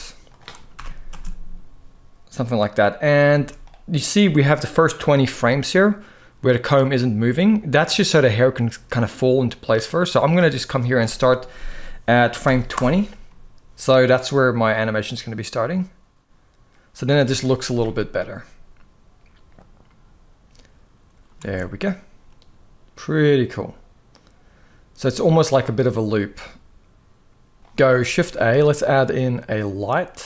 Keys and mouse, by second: 0.5 shift+Left, 0.8 space, 3.0 space, 3.3-10.1 drag, 10.7-12.5 drag, 14.2-16.8 drag, 17.0 space, 21.2 alt+a, 27.6 ctrl+s, 27.6 ctrl+b, 27.8 shift+a.